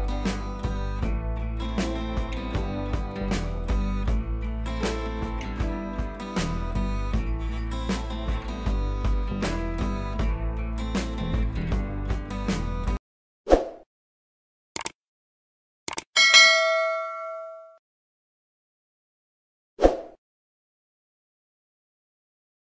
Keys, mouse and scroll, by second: 0.5 click, 6.7 click, 6.7 typing.